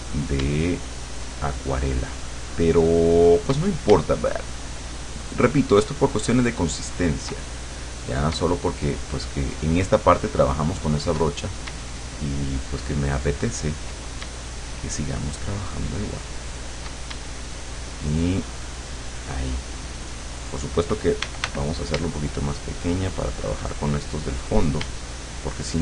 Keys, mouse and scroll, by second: 1.2-3.6 shift+drag, 5.2-7.4 shift+drag, 9.0-11.3 shift+drag, 12.2-14.0 shift+drag, 15.0-17.0 shift+drag, 18.0-19.4 shift+drag, 21.3 d, 22.4-24.6 shift+drag, 25.3-25.8 shift+drag.